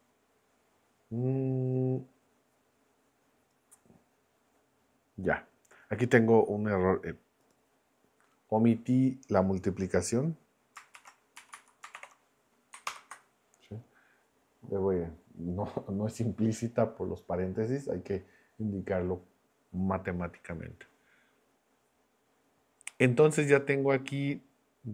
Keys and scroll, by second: 11.0 shift+8, 11.4 Down, 11.5 Left, 11.9 shift+8, 12.9 ctrl+Return.